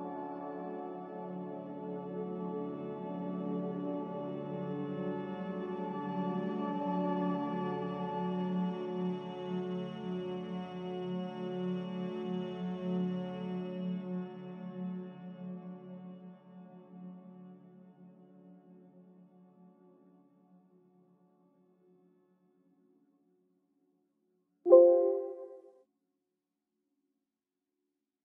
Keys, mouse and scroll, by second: 0.9 ctrl+v, 8.4 Delete, 9.0 Delete, 14.9 ctrl+c, 15.7 ctrl+z, 16.4 ctrl+z, 20.4 ctrl+v, 23.7 Delete, 26.8 Delete, 27.7 z.